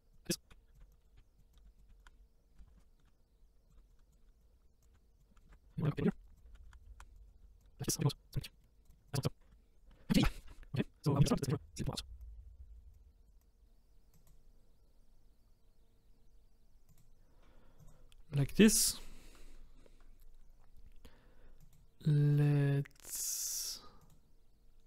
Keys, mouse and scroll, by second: 0.0-7.4 typing, 1.0 click, 2.6 ctrl+z, 3.0 click, 5.4 click, 6.0 click, 7.6 scroll down 2, 7.8 click, 7.8 Tab, 7.9 middle click, 8.3 middle click, 8.7 click, 8.9 click, 8.9 middle click, 9.0 click, 9.1 scroll up 2, 9.8 scroll down 3, 9.9 shift+middle click, 10.5 KP_0, 11.6 click, 12.2 click, 12.9 click, 13.4-17.9 drag, 21.6 click, 22.3 click, 24.0 click.